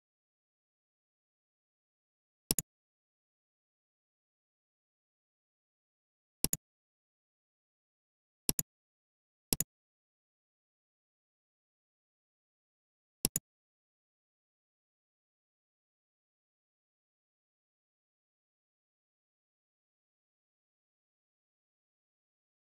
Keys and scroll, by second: 6.3 super+a, 10.9 shift+super+a.